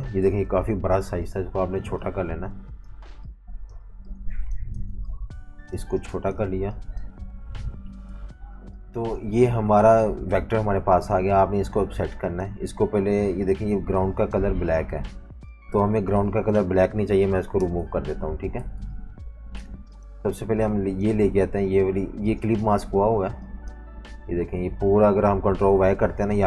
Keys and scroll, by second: 0.2 super+-, 0.4 super+-, 0.6 super+-, 3.8-6.9 typing, 8.1 super+-, 9.0 typing, 17.6 BackSpace, 18.6-19.8 typing, 21.7 super+z, 22.3 v, 22.3 space, 24.1 super+z, 25.7 super+y.